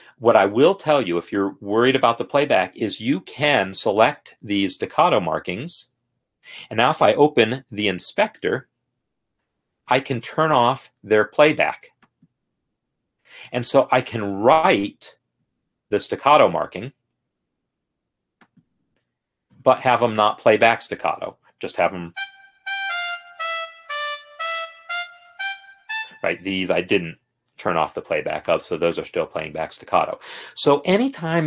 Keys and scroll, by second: 8.8 F8, 22.7 space, 26.2 space.